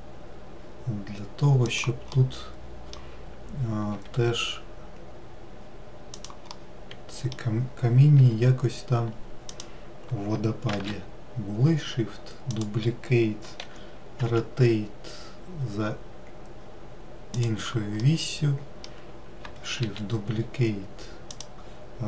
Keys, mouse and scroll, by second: 2.6-4.3 middle drag, 4.3 g, 6.9-8.6 middle drag, 8.6 g, 11.1 shift+d, 18.4-20.2 middle drag, 20.2 shift+d.